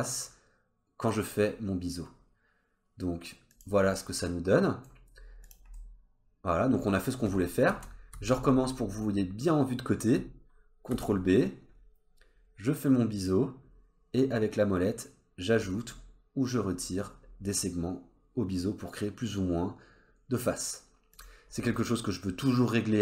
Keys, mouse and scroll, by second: 4.0 middle click, 5.1 scroll down 2, 5.4 click, 5.7 middle click, 7.7 ctrl+z, 8.1 ctrl+z, 8.7-10.2 scroll up 2, 10.9 ctrl+b.